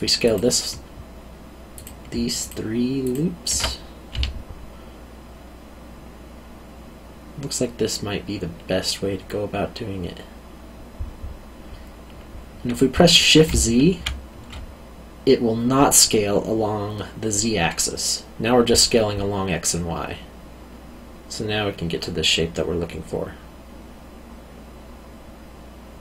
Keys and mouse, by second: 0.2 alt+click, 2.4 alt+shift+click, 4.1 s, 13.8 shift+z.